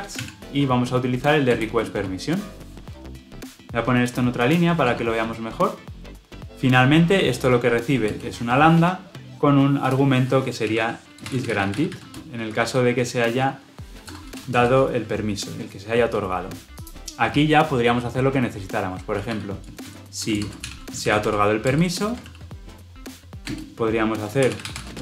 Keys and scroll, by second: 21.6 Return.